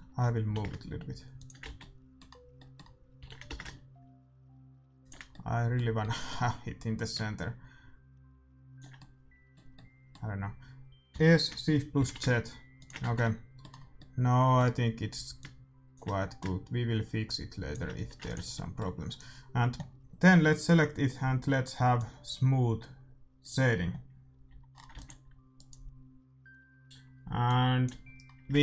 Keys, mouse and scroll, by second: 0.4 g, 1.6 z, 3.2-4.4 middle drag, 3.2 g, 5.2 middle click, 7.0-8.9 drag, 8.9-11.9 middle drag, 11.0 s, 13.0 Tab, 13.0-16.1 middle drag, 15.3-18.1 drag, 17.9 a, 18.1 ctrl+s, 18.5 middle click, 19.3-20.8 right drag, 19.6 middle click, 21.9-25.1 drag, 24.4 a, 24.9 ctrl+s, 25.0 ctrl+w, 28.2-28.6 middle drag.